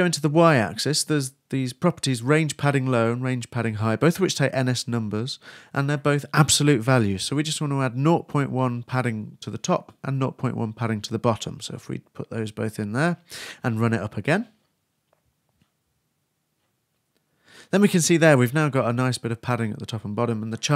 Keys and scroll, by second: 0.8-3.9 typing, 5.7-6.6 typing, 8.9 shift+space, 9.0 shift+2, 11.6-12.7 typing, 12.8 super+s, 13.1 super+r, 13.7 super+Return.